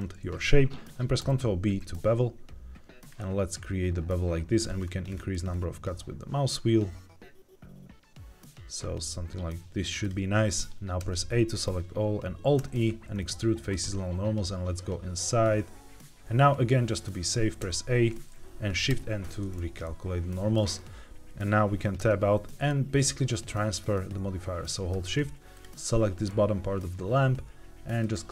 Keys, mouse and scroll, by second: 3.0-3.4 scroll up 2, 4.1-4.5 scroll up 1, 4.5-5.1 scroll down 3, 5.0 scroll up 2, 6.4-7.8 scroll up 1, 9.9 click, 10.9 a, 12.5 alt+e, 18.8 shift+n, 19.8 middle click, 20.5-21.3 scroll down 1, 21.9 Tab, 22.4 middle click, 22.9-23.6 scroll up 1, 25.4 shift+click, 27.9-28.3 drag.